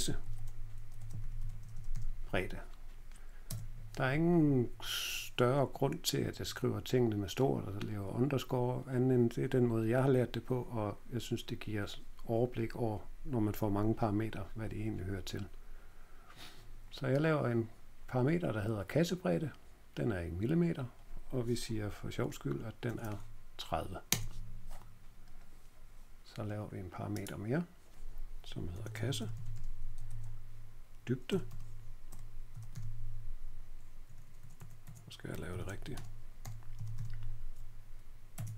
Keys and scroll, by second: 0.0-2.4 typing, 3.4 Tab, 22.8 typing, 24.0 Return, 24.0 typing, 28.4-37.4 typing, 38.3 Tab.